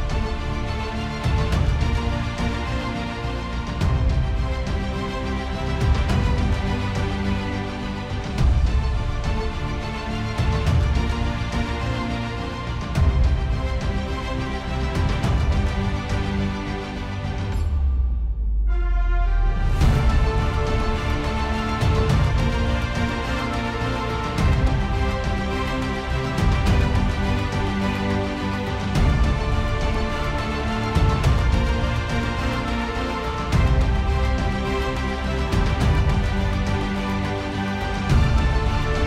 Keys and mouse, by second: 2.8 middle click, 3.9 alt+middle click, 7.3 ctrl+z, 8.8 middle click, 18.9 ctrl+z, 20.8 alt+middle click, 23.7 ctrl+z, 25.4 ctrl+z, 26.4 ctrl+z, 28.0 ctrl+z, 29.5 ctrl+z, 30.6 KP_1, 30.7 Return, 33.5 ctrl+z.